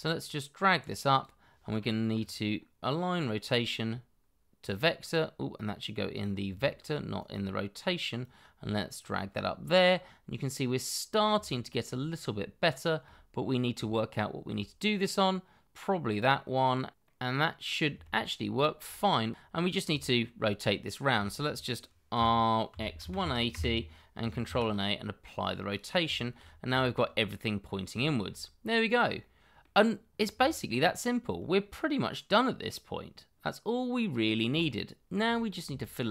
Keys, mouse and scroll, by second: 6.8 ctrl+right click, 9.8 middle click, 11.4 shift+middle click, 12.3 shift+middle click, 13.9 shift+middle click, 17.0 middle click, 18.0 shift+middle click, 19.6 scroll down 1, 20.0 shift+middle click, 21.2 shift+middle click, 22.1 r, 22.7 x, 23.0 1, 23.1 8, 23.5 Return, 24.4 ctrl+a, 26.1 shift+middle click, 26.4-26.8 scroll up 1, 26.8 shift+middle click, 27.3 middle click, 27.9 shift+middle click, 28.5-29.2 scroll down 1, 29.2 middle click, 31.2 shift+middle click, 33.3-34.3 scroll down 1, 34.6 shift+middle click, 35.4 scroll down 1, 35.7 shift+middle click.